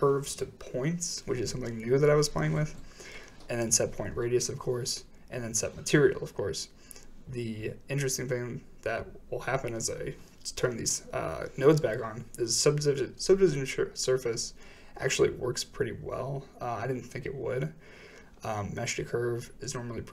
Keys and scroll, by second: 0.2 m, 3.0 m, 4.4 m, 8.9 m, 15.9 m.